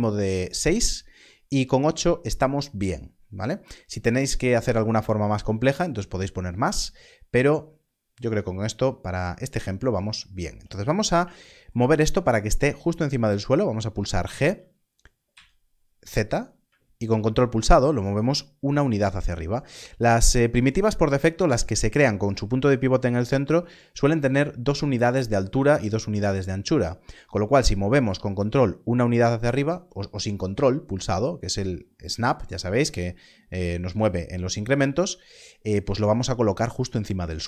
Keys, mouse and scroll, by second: 10.6 scroll up 1, 32.3 click.